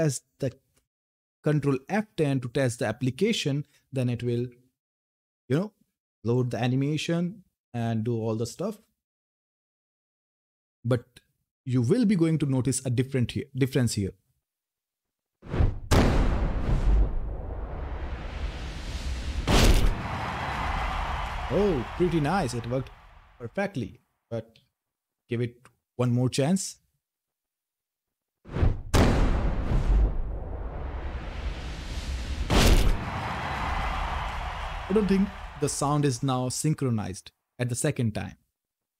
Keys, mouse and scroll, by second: 0.2 ctrl+F10, 21.9-23.8 typing.